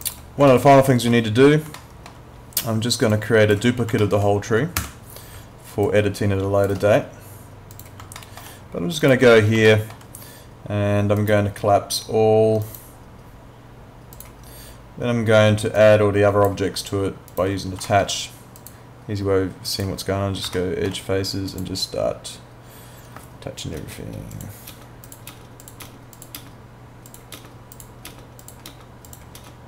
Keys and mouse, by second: 0.0 click, 0.5 alt+middle click, 1.8 alt+middle click, 3.1 click, 4.0 alt+middle click, 4.8 w, 5.9 shift+click, 7.8 click, 8.2 alt+middle click, 9.0 click, 9.7 alt+middle click, 11.2 right click, 12.6 click, 17.8 alt+middle click, 18.6 click, 20.6 alt+middle click, 21.5 click, 23.8 KP_Enter, 24.3 click, 24.7 Return, 24.7 KP_Enter, 25.1 click, 25.3 Return, 25.3 KP_Enter, 25.6 click, 25.8 Return, 26.2 click, 26.4 Return, 27.1 click, 27.4 Return, 27.7 click, 28.1 Return, 28.4 click, 28.7 Return, 29.1 click, 29.4 Return.